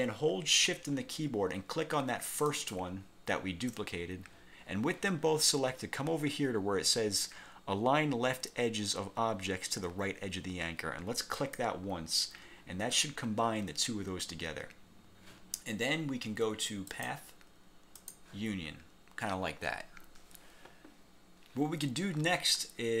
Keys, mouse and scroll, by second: 2.6 shift+click, 11.5 click, 17.0 click, 18.1 click, 22.4 scroll down 1.